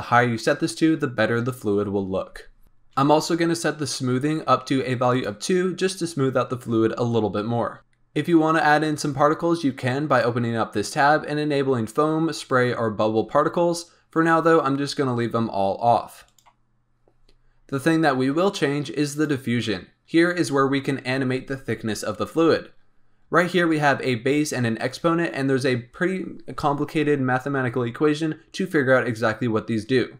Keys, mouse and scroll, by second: 2.6 scroll down 4, 5.1 click, 7.8-8.7 scroll down 8, 10.1 click, 16.2-16.7 drag, 16.7-19.1 scroll down 2, 19.1 click, 19.8-22.8 scroll down 1.